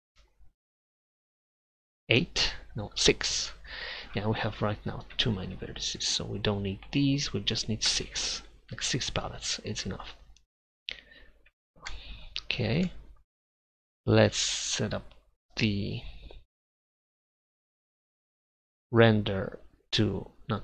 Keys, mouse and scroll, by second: 5.2 Tab, 5.6-9.2 right drag, 8.4 Delete, 11.5 Tab.